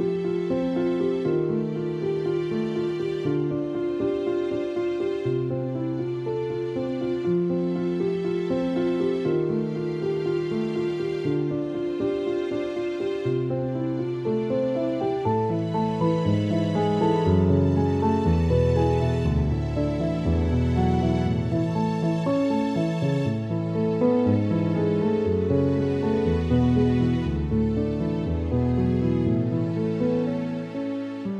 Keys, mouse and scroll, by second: 5.6-7.2 typing, 5.9 click, 24.2 space, 24.4 click, 24.5 space, 25.3 ctrl+=, 26.4 click.